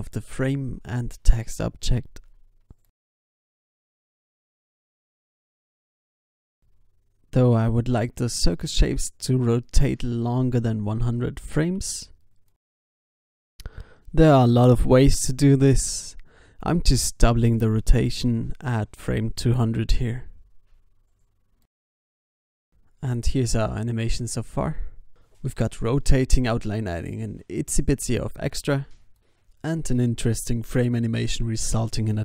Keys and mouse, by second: 0.6 s, 1.4 o, 1.7 i, 2.2 alt+a, 3.0 ctrl+s, 3.2 alt+a, 3.9 alt+a, 4.3 alt+a, 4.3 ctrl+s, 5.1 ctrl+s, 5.8 ctrl+s, 6.8 alt+a, 6.9 ctrl+s, 7.3 ctrl+s, 13.9 i, 14.5 alt+a, 15.3 ctrl+s, 16.3 ctrl+s, 16.4 alt+a, 18.2 click, 22.7 g, 24.0 alt+a, 24.5 ctrl+s, 25.2 ctrl+s, 25.8 ctrl+s, 26.6 ctrl+s.